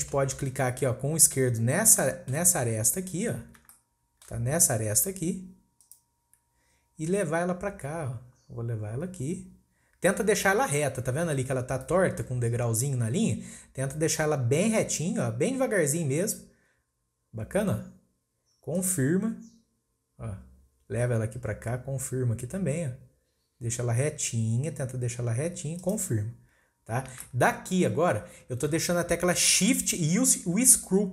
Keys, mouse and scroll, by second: 2.9-3.7 scroll up 2, 3.7-5.8 shift+middle drag, 5.8-8.8 drag, 27.2-30.3 shift+middle drag.